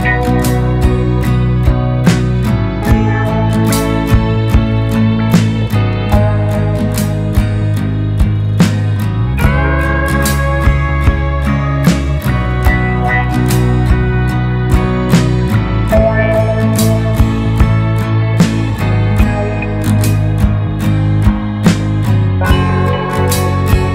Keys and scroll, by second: 0.2 ctrl+a, 0.5-1.5 typing, 3.2 typing, 4.9 typing, 14.4 Delete.